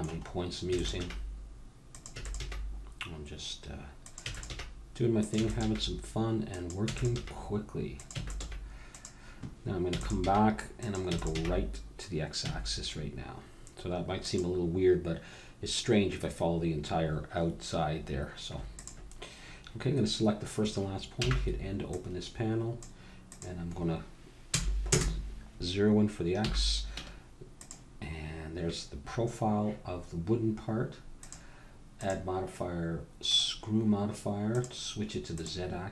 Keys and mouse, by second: 0.6 e, 1.0 g, 2.1 e, 2.4 g, 4.3 e, 5.8 g, 6.8 e, 7.2 g, 8.2 e, 8.4 g, 9.9 e, 10.2 g, 11.1 e, 11.3 g, 17.4-18.7 middle drag, 18.7-20.6 drag, 21.2 n, 21.9-25.3 drag, 26.4 n, 27.0 Tab, 31.2-35.9 drag.